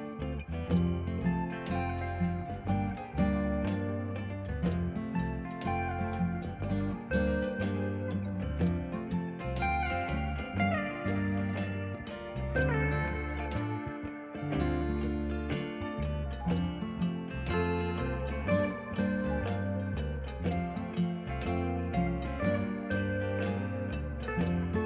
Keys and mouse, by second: 0.7 KP_1, 0.8 Return, 1.0 KP_Subtract, 1.2 Return, 1.9 KP_Subtract, 2.0 Return, 2.3 KP_Subtract, 2.4 KP_5, 2.5 Return, 3.0 click, 4.4 ctrl+shift+x, 4.5 click, 5.4 click, 6.0 click, 6.5 click, 7.6 click, 7.8 click, 13.3 right click, 13.6 click, 13.8 a, 13.9 Return, 14.4 click, 14.9 y, 15.0 click, 15.4 ctrl+click, 15.7 right click, 15.8 click, 16.1 click, 17.1 click, 21.4 click, 22.3 ctrl+r, 22.5 click, 22.6 Escape, 22.8 click, 23.9 a, 24.0 click.